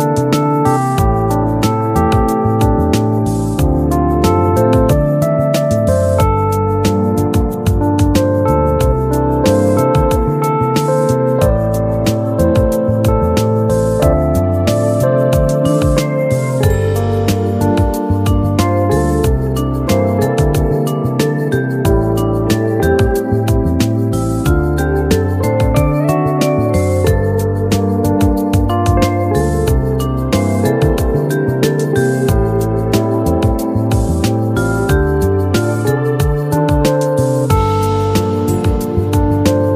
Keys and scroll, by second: 19.5 ctrl+q, 23.4 ctrl+z, 35.1 ctrl+q.